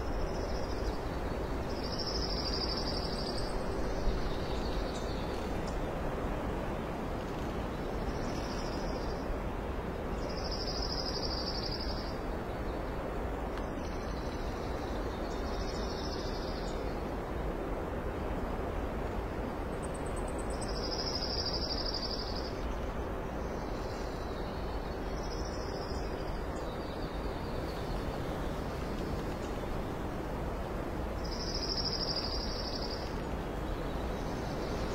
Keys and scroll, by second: 4.4 ctrl+i, 8.5 ctrl+t, 9.5 Left, 9.9 Left, 10.0 Right, 15.7 space, 16.4 space, 17.4 space, 18.0 space, 19.2 ctrl+i, 23.0 alt+space, 23.6 space, 23.9 space, 24.2 x, 24.7 alt+space, 25.0 s, 28.5 ctrl+z.